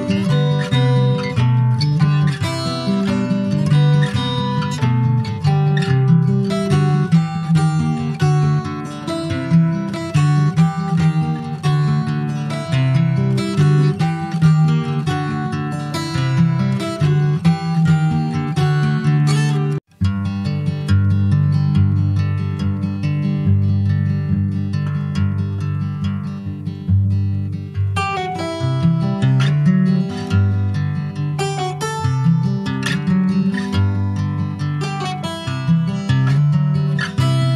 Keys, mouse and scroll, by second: 0.3 alt+middle click, 1.0 click, 1.7 alt+middle click, 2.0-2.5 alt+scroll up 1, 2.5 shift+middle click, 2.7-3.2 scroll up 3, 3.2 alt+z, 4.4 click, 7.7 alt+z, 8.5 ctrl+z, 9.1 click, 9.5 click, 10.7 Tab, 14.2 alt+z, 14.8 click, 16.0 Tab, 17.0 alt+z, 17.5 click, 18.2 alt+z, 18.8 click, 19.6 click, 20.1 Tab, 20.7 click, 21.8 click, 23.8 middle click, 24.2 alt+z, 24.6 scroll down 1, 24.9-26.0 middle drag, 26.0 Tab, 26.2 click, 26.6 scroll down 2, 26.8 middle click, 27.5 ctrl+s, 27.6 click, 27.8-28.9 middle drag, 28.9 ctrl+click, 29.1 middle click, 29.2 scroll up 2, 29.9 scroll down 3, 30.2 middle click, 30.9 ctrl+s, 31.0 ctrl+click, 31.2-33.4 middle drag, 33.4 scroll down 2, 33.6 shift+middle click, 34.3-34.8 scroll up 2, 34.8 ctrl+s, 35.0 middle click, 35.4 ctrl+s, 37.3-37.5 middle drag.